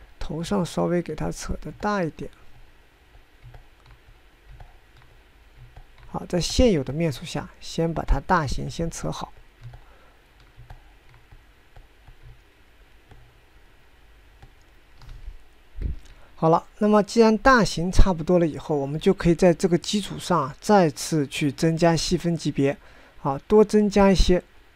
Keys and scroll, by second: 1.0 typing, 3.4 typing, 16.7 9.